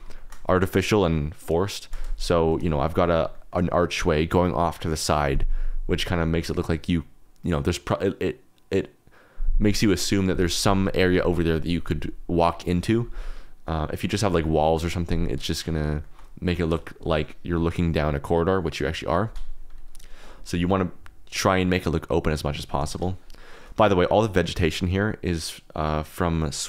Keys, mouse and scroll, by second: 0.1 shift+middle drag, 2.7 shift+middle click, 3.3 shift+middle drag, 16.0 shift+drag, 16.5 shift+click, 23.5 shift+click, 24.5 click, 25.2 click, 26.3 click.